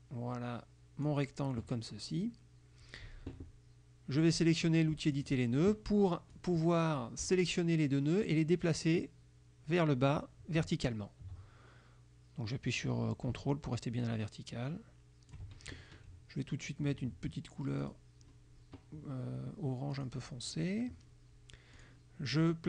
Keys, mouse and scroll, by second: 5.3 click, 6.4 click, 8.4-15.6 drag, 17.9 click, 20.0 click, 21.9 click.